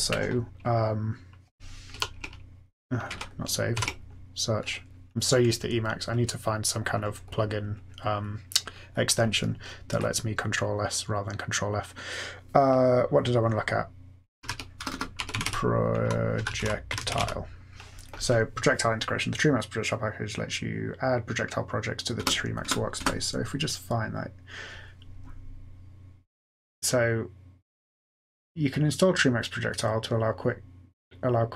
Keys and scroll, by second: 1.9 ctrl+s, 3.0 Escape, 3.7 ctrl+f, 14.1-17.6 typing, 22.1 Return, 22.6 Return, 22.9 Return.